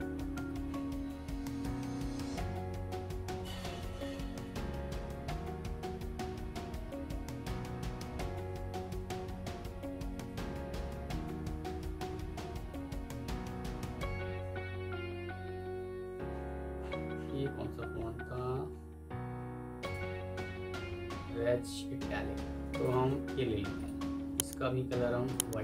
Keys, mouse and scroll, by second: 0.1 Down, 0.3 Down, 1.2 Up, 1.4 Up, 1.5 Up, 1.8 Down, 2.0 Down, 2.5 Down, 3.3 Up, 3.5 Up, 4.1 Down, 4.2 Down, 5.1 Down, 5.7 Down, 5.9 Down, 6.8 Up, 7.0 Up, 7.2 Up, 7.4 Up, 7.6 Up, 7.8 Up, 8.2 Up, 8.4 Up, 8.6 Up, 8.8 Up, 9.0 Up, 9.2-10.4 Up, 10.5 Up, 11.2 Down, 11.3 Down, 12.1 Up, 12.3 Up, 12.4 Up, 12.6 Up, 12.8 Up, 13.3 Down, 14.7 Down, 15.3 Up, 16.2-16.6 scroll down 1, 16.7-19.7 scroll up 1, 22.6 shift+click, 23.4 Escape.